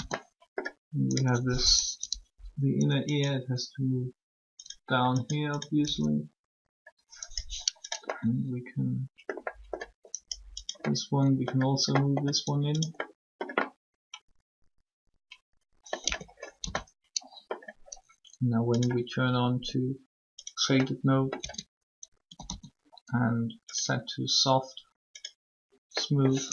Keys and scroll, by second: 1.5-2.3 typing, 5.8 typing, 16.0 Tab, 16.6 typing, 21.4 Tab, 22.2 typing, 23.7 typing.